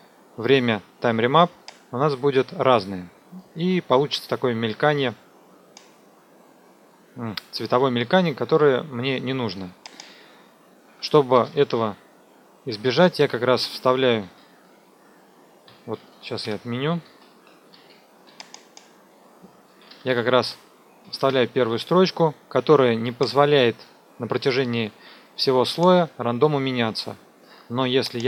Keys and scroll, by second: 10.8 Home, 11.3 Return, 11.6 Up, 14.2 ctrl+z, 16.0 ctrl+z, 16.5 Escape, 17.0 ctrl+z, 19.6 Left, 19.9 Delete, 21.0 KP_2, 21.2 KP_Enter.